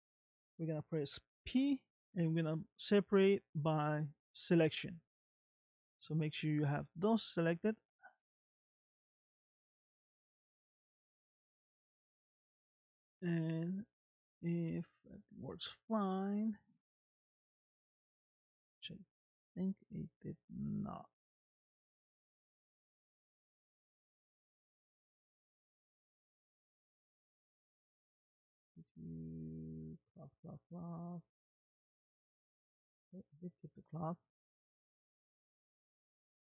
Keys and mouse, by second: 1.4 p, 7.5-10.2 middle drag, 12.1 Tab, 18.5-20.9 middle drag, 22.2 click, 31.6 click.